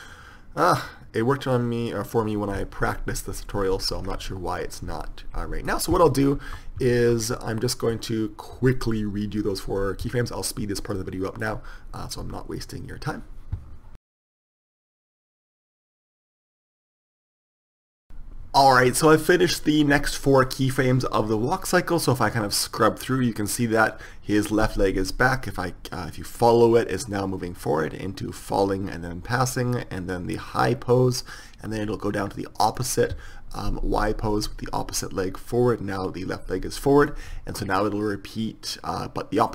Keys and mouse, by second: 4.0-6.6 middle drag, 6.6 ctrl+z, 7.1 ctrl+z, 11.1 middle click, 12.4 KP_3, 14.7-17.9 typing, 15.0 click, 16.2 click, 16.4 click, 16.4 ctrl+z, 16.6 click, 16.8 click, 17.4 click, 17.5 click, 17.5 right click, 17.8 right click, 22.7-27.6 drag, 37.4-39.0 drag.